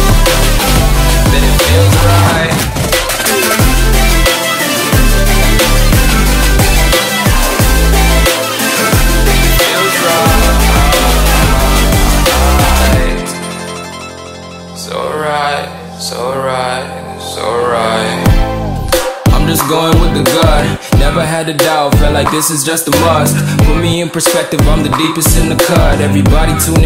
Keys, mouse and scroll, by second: 5.1 right click, 6.1 click, 10.4-14.4 typing, 12.3 Return, 14.9 click, 17.9 typing, 18.1 Return, 18.9 click, 19.0 F10, 19.3 click, 19.5-21.4 drag, 21.3 Delete, 21.6 click, 22.0-23.2 typing, 23.6 click, 25.7 Delete, 25.7 click, 26.8 click.